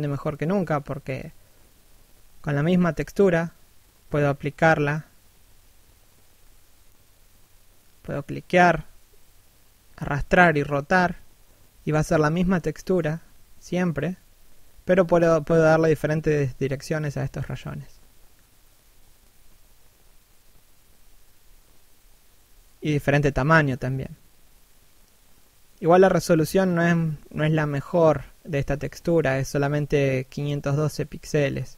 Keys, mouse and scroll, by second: 0.4 shift+click, 2.9 middle click, 3.5 middle click, 4.5 scroll down 1, 5.1 middle click, 5.9 shift+middle click, 7.0 middle click, 7.8-8.6 scroll up 1, 8.6 f, 10.2 right click, 10.7 ctrl+f, 13.7 click, 18.4 shift+click, 23.5 middle click, 25.6 shift+click, 28.6 middle click, 30.5 click.